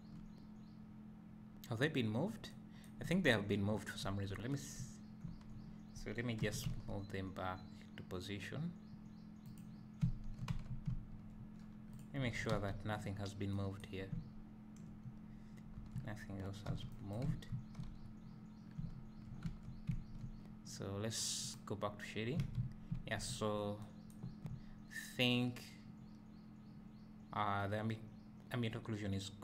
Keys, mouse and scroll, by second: 4.8 Tab, 6.5 g, 10.2 `, 10.6 Tab, 11.1 `, 11.6 scroll down 1, 12.0 click, 12.3 Tab, 12.7 a, 15.9 scroll down 1, 17.1 b, 17.5 Tab, 17.9 a, 19.5 Tab, 19.9 `, 21.5 click, 22.2 scroll down 2, 22.6 a, 22.8 scroll down 2, 23.0 `, 23.4 scroll down 1, 24.4 scroll down 1, 24.6 `.